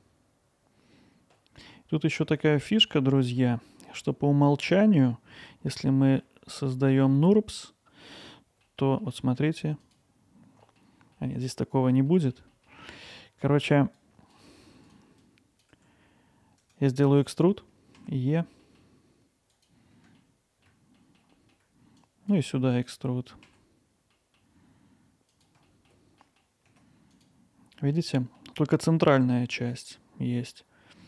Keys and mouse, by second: 1.6 middle click, 2.6 middle click, 3.4 middle click, 5.4 alt+middle click, 6.7 middle click, 7.5-9.0 alt+middle drag, 9.8 click, 10.6 middle click, 11.2 alt+middle drag, 12.1 alt+middle drag, 12.5 middle click, 12.8 alt+middle click, 14.0 click, 15.3 click, 17.1 middle click, 18.6 middle click, 19.5 click, 20.2 alt+middle click, 21.0 middle click, 22.1 click, 22.5 middle click, 24.1 middle click, 25.7 alt+middle click, 26.2 middle click, 27.1 click, 27.8 middle click, 28.2 middle drag.